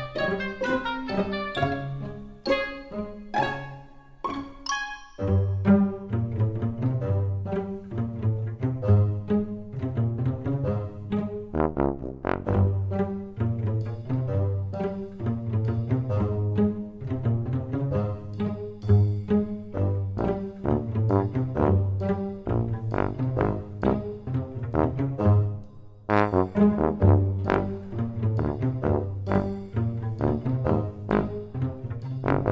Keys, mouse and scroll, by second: 13.3 s, 15.8 e, 30.6 r.